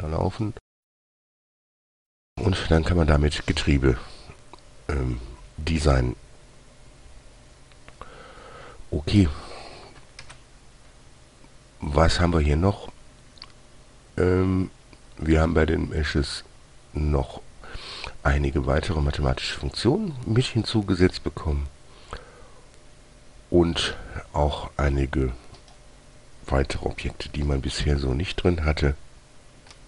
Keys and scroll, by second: 10.6 shift+a, 27.8 g.